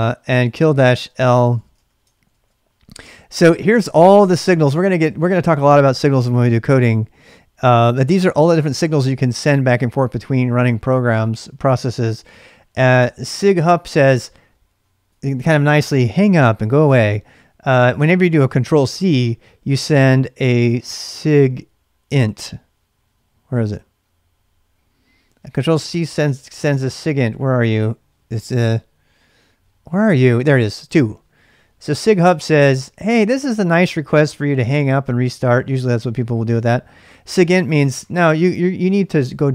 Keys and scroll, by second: 0.0-2.0 typing, 2.1 ctrl+a, 2.3 ctrl+a.